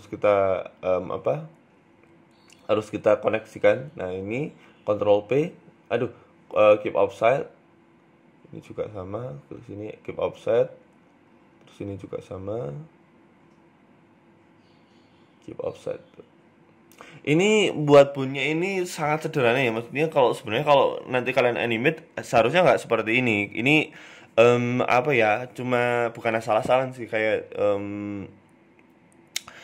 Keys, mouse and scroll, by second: 0.1 shift+right click, 1.0 ctrl+p, 2.7 right click, 3.2 right click, 3.7 shift+right click, 4.4 ctrl+p, 5.8 ctrl+z, 6.5 ctrl+p, 8.4 right click, 8.7 shift+right click, 10.1 ctrl+p, 11.3 scroll down 2, 11.6 shift+middle click, 11.9-12.3 scroll up 1, 12.3 shift+middle click, 12.7 right click, 13.2 right click, 13.5 shift+right click, 17.6 ctrl+p, 18.4 middle click, 18.6 Tab, 18.7 scroll up 1, 18.9 middle click, 18.9 scroll down 2, 19.7 Tab, 19.9 middle click, 20.4 right click, 21.0 shift+right click, 22.5 Tab, 22.7 middle click, 24.3 scroll up 1, 27.0 click, 27.4 click, 28.9 right click.